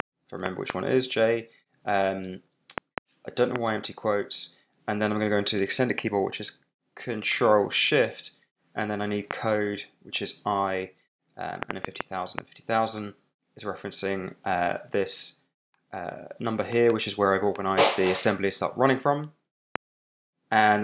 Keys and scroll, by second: 0.0-0.6 typing, 2.7 shift+', 3.4 shift+space, 4.3 space, 9.2 i, 11.3-12.1 typing, 13.7 super+Tab, 18.8 super+Tab, 19.7 super+Return.